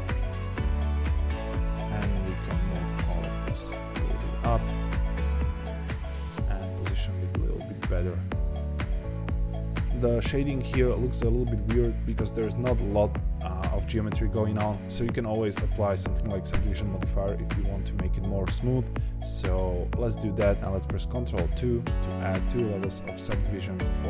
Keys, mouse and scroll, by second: 0.4 Tab, 0.8 shift+click, 1.4 click, 1.8 shift+click, 2.3 shift+click, 2.7 g, 4.6 click, 5.1 shift+click, 5.5 g, 7.0-9.2 middle drag, 9.2 click, 9.8-10.2 scroll down 1, 19.2 click, 21.4 ctrl+2, 22.4 click, 22.9 ctrl+2, 23.4 click, 23.8 ctrl+2.